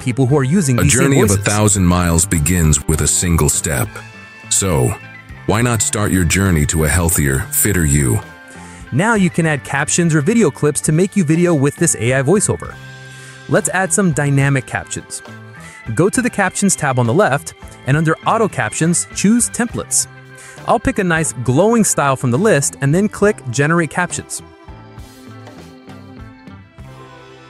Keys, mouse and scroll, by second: 0.0 click, 2.7-4.4 drag, 11.6 click, 14.6-15.6 drag, 21.5 click, 26.9 click.